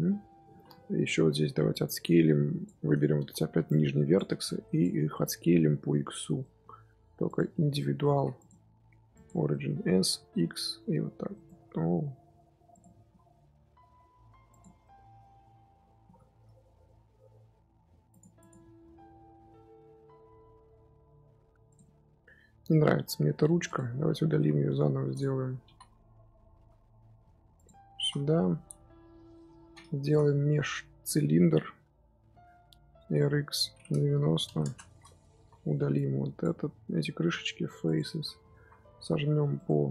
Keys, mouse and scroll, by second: 0.4 z, 0.6 shift+middle click, 1.2-1.6 scroll up 4, 1.6 click, 3.3 1, 3.6 click, 4.3 shift+click, 5.0 scroll down 2, 5.0-6.2 middle drag, 6.2 scroll up 1, 6.2 scroll down 1, 6.3 middle click, 7.2 click, 8.0 ctrl+z, 8.3-9.4 drag, 9.4 middle click, 9.9 s, 12.6 click, 12.9 s, 14.6 Tab, 14.7 middle click, 15.5 Tab, 15.9 s, 18.1 Tab, 18.3 click, 18.6 z, 18.9-19.4 middle drag, 19.4 z, 19.5-21.6 middle drag, 21.6 click, 21.7-23.5 middle drag, 23.5 x, 24.3 KP_1, 25.0 click, 25.4 Tab, 25.6-27.9 typing, 26.2 middle click, 27.5 click, 28.1 Tab, 29.0 KP_1, 30.0 shift+a, 33.0 r, 35.1 Tab, 35.3 z, 35.6 3, 35.9 click, 37.1 x, 38.0 middle click, 38.5 z, 38.8 a, 39.0 s.